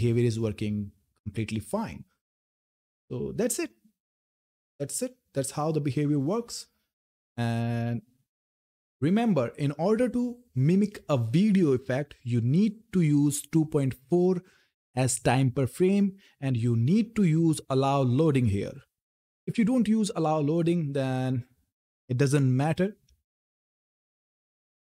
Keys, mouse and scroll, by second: 3.1-9.5 drag, 11.6 click, 19.8 click, 21.9 F10.